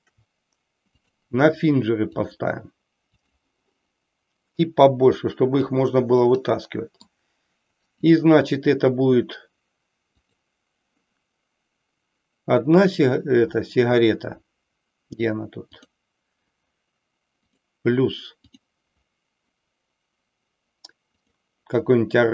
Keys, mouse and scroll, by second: 0.9-2.4 drag, 3.2 click, 4.5-5.7 drag, 6.1 middle click, 7.9 click, 10.1 click, 15.9-16.7 drag, 17.4 click, 18.4-21.4 drag.